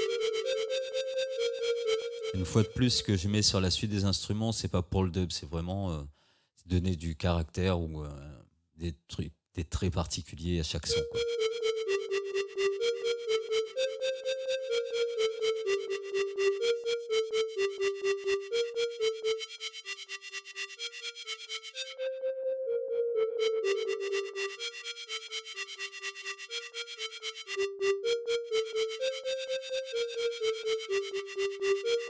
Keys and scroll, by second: 2.0 space, 10.9 space.